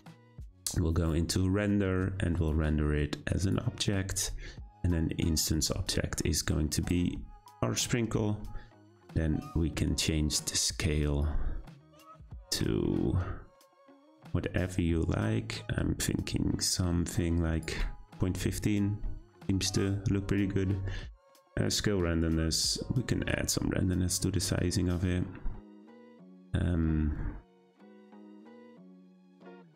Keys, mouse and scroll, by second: 0.3-1.0 scroll up 1, 1.0-1.6 drag, 1.6-2.4 scroll down 2, 2.4-5.4 drag, 5.5 click, 11.2-14.2 drag, 21.7-24.8 shift+drag.